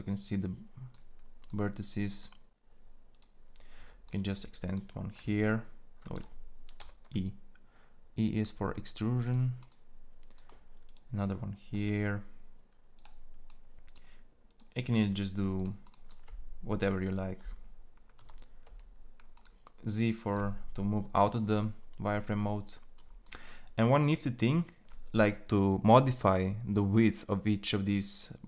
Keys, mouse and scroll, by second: 4.8 r, 6.5 r, 8.0 e, 11.5 e, 14.7 e, 18.3 z.